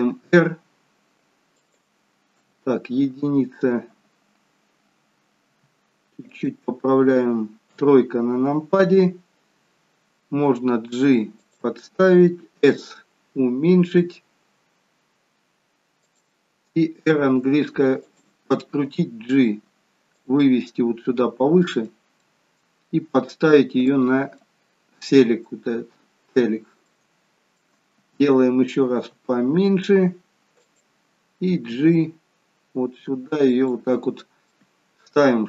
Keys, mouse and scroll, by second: 2.4 KP_1, 5.3 r, 7.6 KP_3, 10.4 g, 12.6 s, 18.9 g, 20.7 middle click, 22.2 middle click, 22.9 g, 24.3 middle click, 25.6 scroll up 2, 26.8 shift+middle click, 29.0 s, 31.7 g, 34.4 middle click.